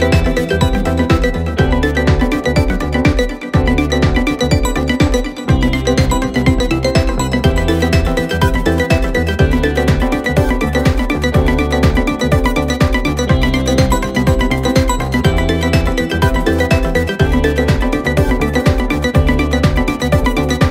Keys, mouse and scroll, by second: 0.8 click, 1.1 middle click, 2.0 ctrl+click, 2.2 middle click, 2.9 shift+click, 3.2 middle click, 4.0 ctrl+click, 4.3 ctrl+z, 4.9 ctrl+click, 5.1 middle click, 6.0 shift+click, 6.2 middle click, 6.7 shift+click, 6.9 middle click, 7.7 ctrl+click, 7.9 middle click, 8.6 shift+click, 8.8-9.8 middle drag, 9.8 ctrl+click, 10.0 middle click, 11.0 shift+click, 11.1 middle click, 12.0 ctrl+click, 12.3-13.8 middle drag, 15.3 click, 15.8-16.4 scroll up 7, 16.6 click, 17.5-17.8 scroll down 1, 17.8 click, 20.1 0.